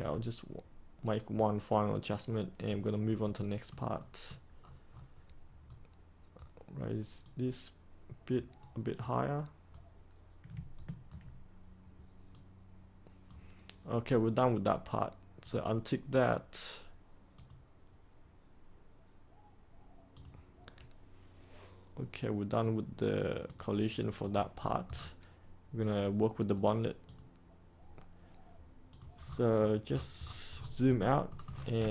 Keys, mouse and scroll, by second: 2.0 click, 3.2 middle click, 4.5-4.8 scroll down 1, 4.8-5.6 scroll up 1, 5.6-6.8 right drag, 7.2-8.9 drag, 8.9 right click, 10.7 ctrl+right click, 12.3-13.9 drag, 24.5-26.4 scroll down 1, 26.4 click, 29.2-30.9 scroll down 1, 30.9 middle click, 31.4-31.9 scroll down 1.